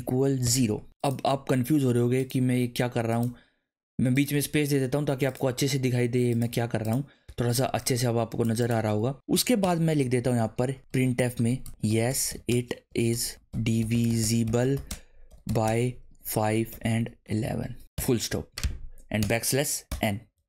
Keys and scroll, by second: 0.0-1.3 typing, 2.4 space, 3.3 space, 4.3 space, 5.4 space, 6.5 space, 9.3 shift+[, 9.6 Return, 10.6-17.9 typing, 17.8 Right, 19.2 \, 19.9 n.